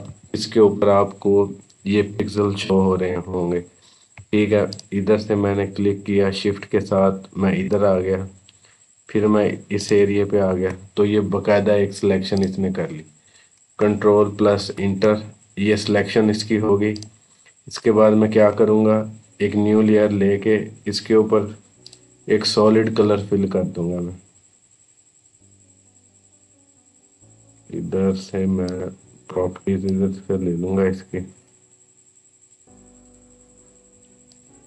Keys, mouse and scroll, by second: 0.7 scroll up 1, 4.0 shift+Num_Lock, 4.0-4.5 scroll up 1, 4.5 shift+click, 7.4 shift+click, 14.4 ctrl+Return, 16.8 click, 18.4-18.8 scroll down 1, 21.7 click, 28.5-34.6 drag.